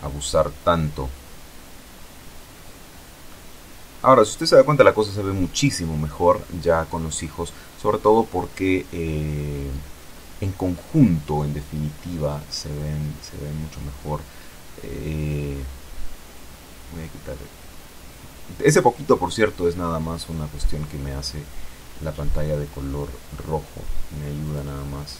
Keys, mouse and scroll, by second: 1.9 F12, 16.4 click, 20.5 Escape, 21.8 click, 22.7 click.